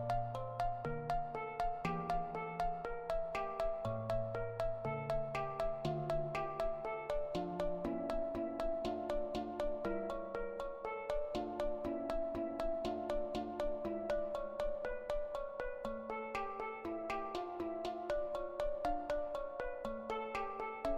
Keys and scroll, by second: 0.7-1.5 typing, 11.9 ctrl+i, 12.0 Delete, 15.5 ctrl+v, 16.6 -, 16.9 Return.